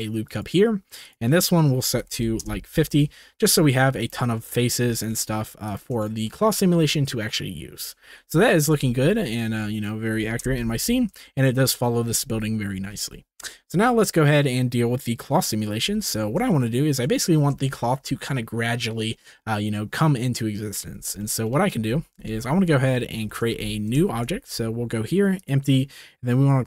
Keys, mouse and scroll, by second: 1.2-2.4 drag, 4.4 middle click, 4.9 3, 5.0 click, 5.2 middle click, 6.1 shift+middle click, 8.3 shift+middle click, 9.0 ctrl+s, 10.4 KP_0, 11.2 shift+middle click, 12.9 ctrl+s, 15.8 t, 16.5 shift+middle click, 17.7 shift+middle click, 21.2 shift+middle click, 22.0 ctrl+s, 22.4 shift+middle click, 23.4 shift+right click, 23.5 Tab, 24.0 shift+a.